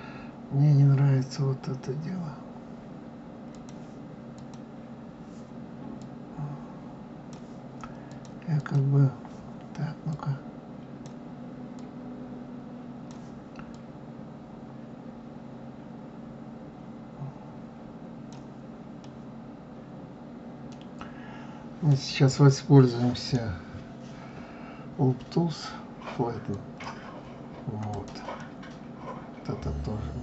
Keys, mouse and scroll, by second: 3.5 click, 4.4 click, 6.0-8.3 drag, 8.6 click, 10.1-16.7 drag, 19.0-22.1 middle drag, 23.1-26.8 right drag, 26.8 click, 27.9 click, 28.4-30.2 middle drag.